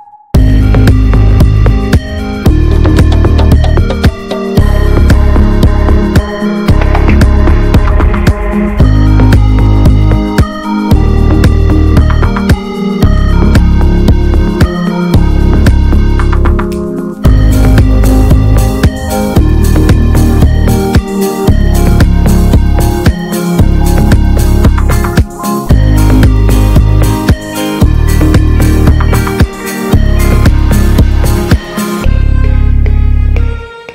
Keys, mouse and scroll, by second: 0.0 middle click, 1.0-4.0 drag, 4.0 middle click, 4.0-4.5 scroll up 1, 4.5-5.8 drag, 5.8 middle click, 6.3-6.7 scroll down 4, 6.7 middle click, 7.2-8.0 scroll down 4, 8.0 scroll up 3, 8.3-10.1 drag, 10.1 middle click, 10.5-11.4 scroll up 4, 11.4-13.2 drag, 13.2 middle click, 13.7-14.3 scroll down 4, 14.3 middle click, 14.7-15.6 scroll up 5, 15.6 middle click, 16.1-16.6 scroll up 1, 16.6 middle click, 16.6 click, 17.1-17.9 scroll up 2, 17.9-19.5 drag, 22.3-22.6 scroll down 5, 24.3 ctrl+s, 24.8 click, 26.3 click, 26.5 scroll up 1, 26.8-29.6 drag, 33.0-33.9 drag.